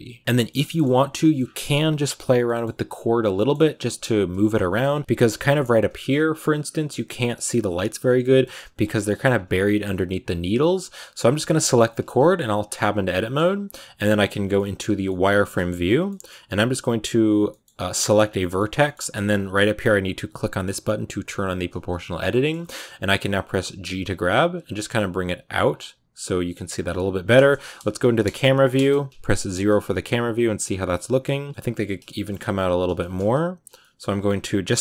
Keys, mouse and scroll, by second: 0.1 click, 0.2-1.2 middle drag, 1.2 scroll up 4, 2.3 middle click, 2.8 scroll down 1, 3.2-4.5 middle drag, 4.5 KP_0, 5.1 shift+middle click, 5.2-5.8 shift+scroll up 4, 5.8 shift+middle click, 6.5-8.0 scroll down 2, 8.0 scroll down 1, 8.1 middle click, 8.3-9.5 scroll up 7, 8.8 shift+middle click, 9.5-10.8 middle drag, 10.8 right click, 11.4-12.6 shift+middle drag, 12.6 Tab, 12.9-14.3 middle drag, 14.3 z, 14.4 middle click, 14.7 scroll up 1, 14.9-16.9 middle drag, 16.9 right click, 17.3 middle click, 17.6-18.1 scroll up 1, 18.1 scroll down 2, 18.2-21.5 middle drag, 21.5 click, 21.8-23.0 middle drag, 23.0 scroll down 2, 23.4 g, 25.0 right click, 25.1 g, 25.8 g, 26.3 right click, 26.5 g, 27.5 KP_2, 28.6 KP_0, 29.3 Tab, 29.8 z, 30.6 a, 30.6-31.2 scroll down 3, 31.2 click, 31.5 scroll up 4, 31.7 Tab, 32.0 shift+middle click, 32.5 z, 32.8-33.5 scroll up 2, 32.8 middle click, 33.5 right click, 33.7 middle click, 34.2 right click, 34.7 shift+middle click.